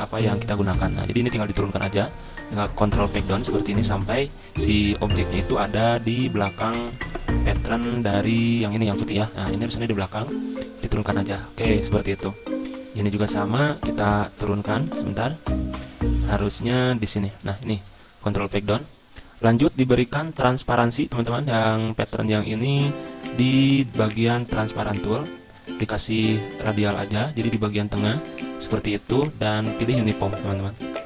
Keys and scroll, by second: 0.3 ctrl+Page_Down, 0.4 ctrl+Page_Down, 0.6 ctrl+Page_Down, 2.2 ctrl+Page_Up, 2.4 ctrl+Page_Up, 2.4 ctrl+Page_Up, 4.9 ctrl+Page_Down, 5.3 ctrl+Page_Down, 5.7 ctrl+Page_Up, 6.0 ctrl+Page_Up, 6.3 ctrl+Page_Up, 9.7 ctrl+Page_Down, 10.0 ctrl+Page_Down, 10.2 ctrl+Page_Down, 10.5 ctrl+Page_Up, 10.7 ctrl+Page_Up, 14.9 ctrl+z, 17.9 ctrl+Page_Down, 18.0 ctrl+Page_Down, 18.1 ctrl+Page_Down, 18.6 ctrl+Page_Up, 18.8 ctrl+Page_Up.